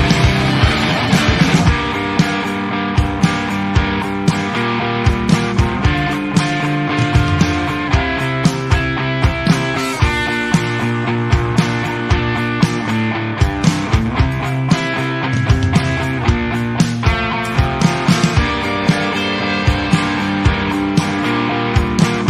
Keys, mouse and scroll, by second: 0.8-3.8 drag, 3.8 a, 3.9-4.3 middle drag, 4.3 alt+a, 4.5 KP_0, 4.7 scroll down 1, 4.9-5.3 shift+middle drag, 5.3-5.8 scroll up 2, 5.8 shift+middle click, 6.5 click, 11.2-12.6 shift+middle drag, 12.6-14.4 scroll up 1, 14.4 click, 14.6 shift+middle drag, 14.8-15.3 scroll up 4, 15.3 Tab, 15.6 alt+a, 15.7 click, 16.8 l, 17.3 s, 18.6 o, 18.8 s, 19.6 scroll up 1, 19.8 s, 20.9 middle click, 21.4 KP_Decimal, 21.8-22.2 scroll down 14.